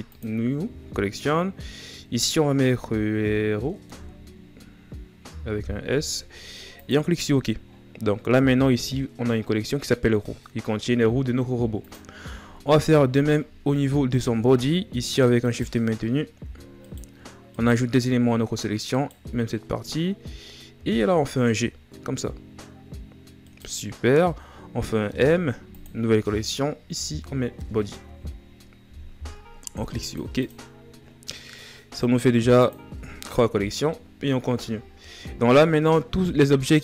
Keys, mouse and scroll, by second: 7.6-8.3 scroll down 1, 8.3-9.3 scroll down 9, 11.5 click, 12.3-12.9 scroll up 2, 12.9-13.7 shift+scroll up 8, 13.7-15.2 shift+scroll up 5, 15.2-19.2 right drag, 19.2-20.3 shift+scroll up 6, 20.3-21.3 scroll down 6, 21.3 g, 30.1 click, 31.0-31.9 scroll down 1, 32.3-33.6 drag, 33.6-34.5 scroll up 2, 34.5-34.8 shift+scroll up 1, 35.3-36.8 scroll down 10.